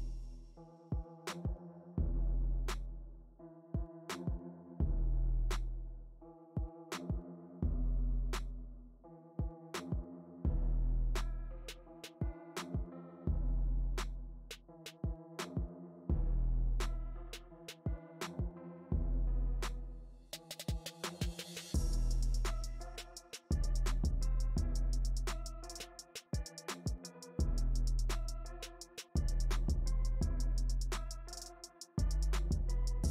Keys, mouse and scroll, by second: 2.2-3.3 shift+middle drag, 3.3-4.6 drag, 4.6 middle click, 5.3-6.8 drag, 6.8 middle click, 7.4-13.5 drag, 13.5-14.6 middle drag, 14.6-19.3 drag, 19.3 middle click, 19.9-22.9 drag, 22.9-24.1 middle drag, 24.1 space, 24.5 f, 25.2-27.0 drag, 27.0 space, 27.4 f, 28.0-31.0 drag, 32.7-33.1 middle drag.